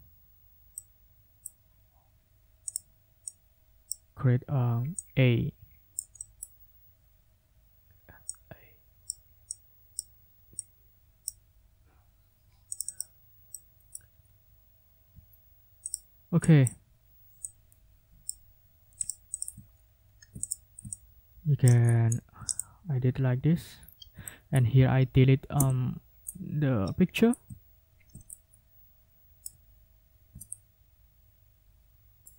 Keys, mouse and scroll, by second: 1.1 middle click, 2.7 click, 3.3 click, 5.0-6.1 drag, 8.3-9.2 scroll up 2, 9.5 click, 10.6 click, 12.7 click, 13.5 right click, 14.2 ctrl+scroll down 2, 14.8 ctrl+scroll up 1, 15.9 click, 16.4 click, 17.4-18.4 drag, 19.0 click, 19.3 ctrl+click, 19.7 scroll down 2, 20.1 scroll up 2, 20.4 middle click, 20.9 middle click, 21.8-22.4 scroll down 2, 23.8 ctrl+scroll down 2, 24.2 ctrl+click, 25.5 Delete, 27.6 ctrl+scroll up 2, 28.3-29.6 ctrl+middle drag, 30.0 ctrl+scroll up 2.